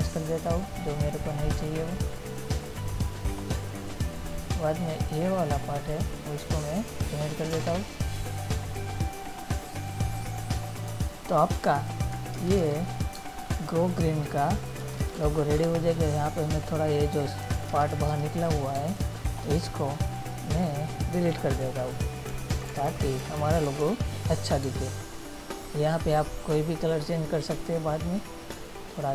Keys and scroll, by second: 12.6 ctrl++, 13.4 space, 15.0 ctrl++, 15.9 space, 17.9 ctrl++, 19.0 space, 21.9 Delete, 22.7 ctrl+-, 24.9 space.